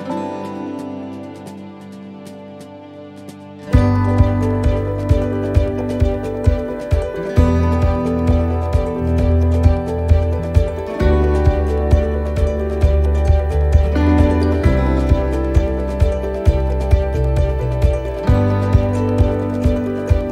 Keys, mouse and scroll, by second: 0.3 right click, 2.9 shift+right click, 3.7 shift+d, 5.7 click, 7.3 scroll up 3, 7.7 shift+middle click, 8.1 scroll up 2, 10.1 right click, 11.7 click, 13.1 click, 15.9 click, 16.0 shift+middle click, 16.9 right click, 19.2 click.